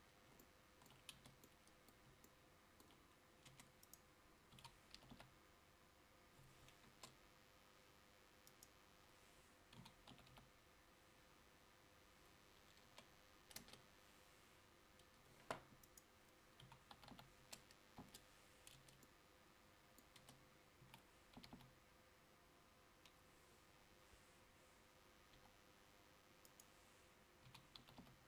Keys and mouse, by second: 1.2 Tab, 3.6 Tab, 4.6 s, 18.9 Tab, 20.3 Tab, 21.0 s.